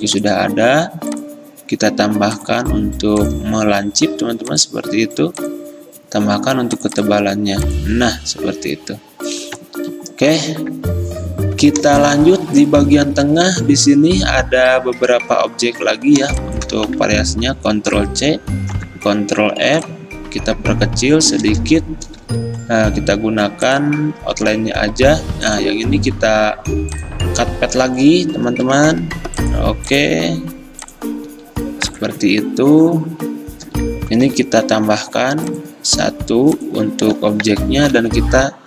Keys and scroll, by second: 18.0 ctrl+c, 18.8 ctrl+f, 22.3 d, 24.7 a, 28.7 -, 34.3 =, 38.0 a.